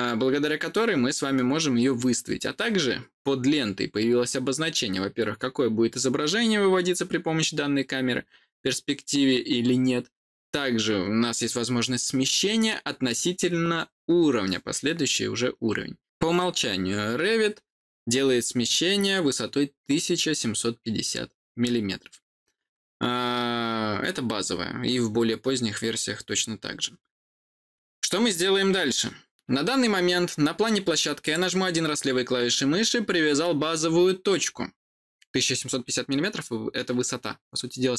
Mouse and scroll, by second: 31.1 click.